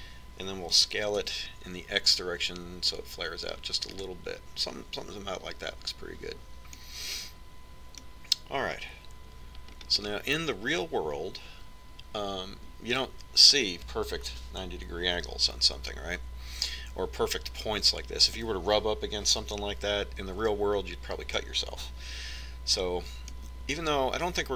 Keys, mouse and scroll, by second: 2.6 s, 7.0 z, 8.7-10.4 middle drag, 11.5-13.7 middle drag.